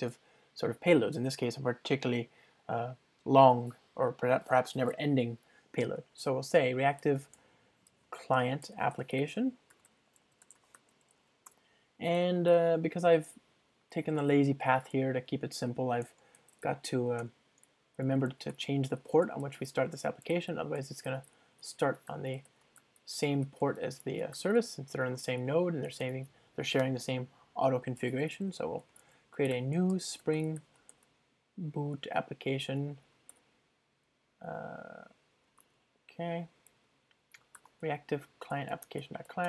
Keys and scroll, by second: 17.3 Return, 29.0 ctrl+alt+shift+Left, 36.1 Return, 38.6 Return.